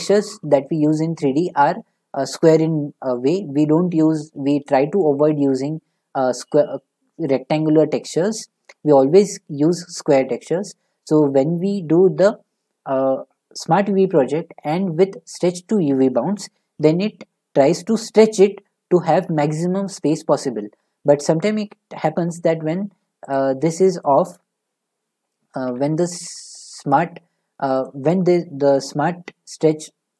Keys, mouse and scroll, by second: 12.2 u, 13.6-16.7 drag, 23.3 click, 24.0 click, 25.6 u, 26.5 click, 27.9 click.